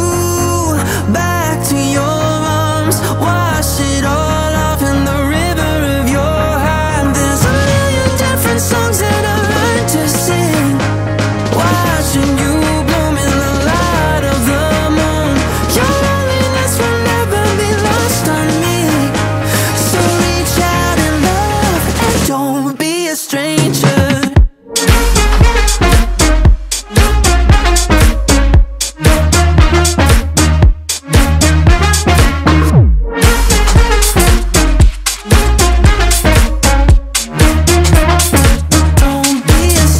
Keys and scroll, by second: 7.6 ctrl+a, 8.3 1, 8.9 5, 9.2 0, 29.2 ctrl+a, 29.7 1, 29.9 5, 30.4 0.